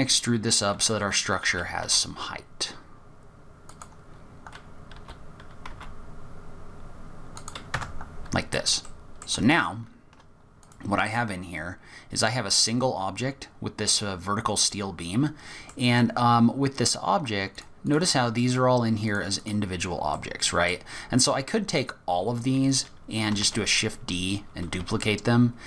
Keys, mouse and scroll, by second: 0.4-0.7 scroll up 2, 1.4 g, 4.1-4.6 scroll down 4, 4.9 g, 7.7 Tab, 8.1-8.7 scroll up 2, 8.8 middle click, 9.5-10.0 shift+scroll down 3, 9.8-10.6 shift+scroll up 3, 10.6 click, 11.2 scroll down 1, 11.4-12.8 scroll up 13, 12.8 middle click, 15.8-16.5 scroll down 1, 16.5 scroll down 1, 17.5 click, 17.8 click, 18.5 click, 19.0 click, 19.4 click, 20.1 middle click, 21.0-21.5 scroll down 6, 21.5 click, 23.4 shift+d.